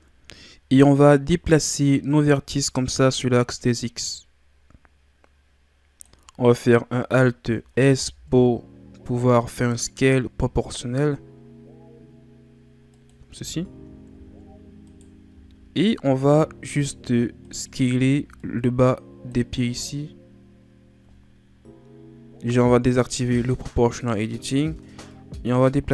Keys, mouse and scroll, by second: 0.0 n, 2.1-5.3 drag, 7.7 alt+s, 13.6 scroll down 1, 14.2-14.8 scroll up 1, 14.8 right click, 15.4-15.8 scroll down 1, 15.8-16.4 scroll up 2, 16.4 z, 17.5 right click, 17.9 b, 23.3 click, 25.1-25.9 drag.